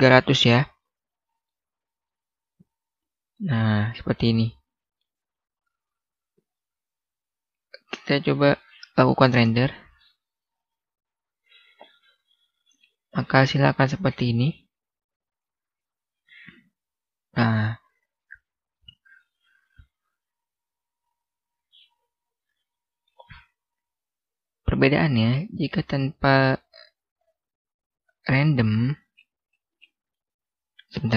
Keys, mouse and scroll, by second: 1.6-1.9 scroll up 1, 1.9 middle click, 3.5-4.2 scroll down 1, 4.2 middle click, 5.4-8.2 scroll up 1, 9.0-9.3 scroll down 1, 9.3 F12, 11.9-13.1 scroll down 1, 13.1-13.6 scroll up 1, 14.5-14.9 scroll down 1, 14.9-17.1 scroll up 1, 21.3-22.1 scroll down 1, 22.1 scroll up 1, 22.6 middle click, 24.2 Escape, 25.5 scroll up 1, 25.6 scroll down 1, 26.2-26.7 scroll up 1, 26.7-27.2 scroll down 1, 29.1-29.5 scroll up 1.